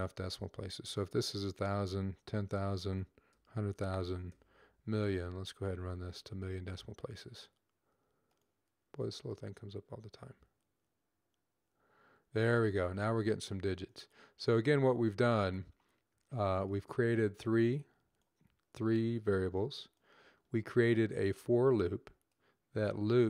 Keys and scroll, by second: 1.9 0, 3.2-4.1 typing, 6.3-6.7 typing.